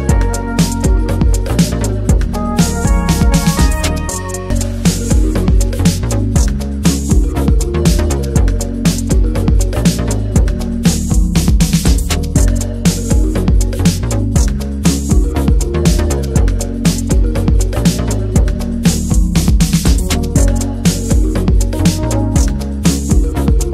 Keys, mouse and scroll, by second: 0.2-0.7 scroll up 1, 16.1 alt+middle click, 16.7 shift+middle click, 16.8 scroll up 1, 17.1-19.7 shift+middle drag, 19.7-21.7 drag, 21.7 ctrl+z, 21.8-22.2 scroll down 1.